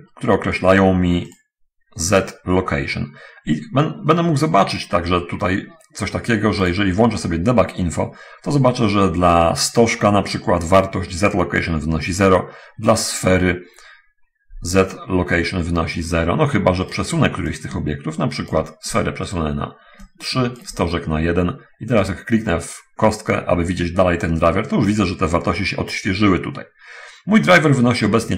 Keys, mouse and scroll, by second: 1.7 click, 2.6 click, 7.1 click, 7.8-8.7 scroll down 1, 16.9 right click, 17.9-19.1 ctrl+drag, 19.7 right drag, 20.5-21.2 ctrl+drag, 22.4 right drag.